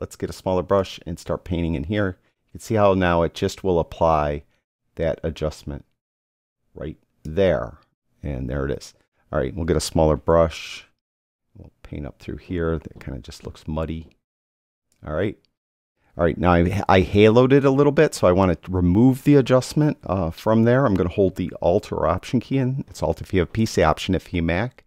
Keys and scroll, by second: 0.4 [, 10.3 [.